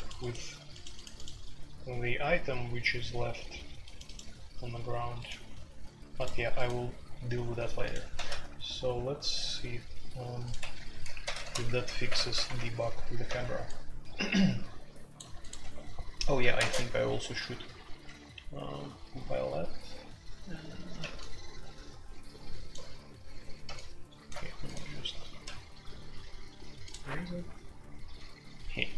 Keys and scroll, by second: 0.0-28.9 typing, 10.5 Escape, 10.7 F2, 11.2 ctrl+c, 11.3 ctrl+c, 12.0 alt+2, 12.2 alt+p, 12.5 Return, 15.7 Escape, 16.7 Tab.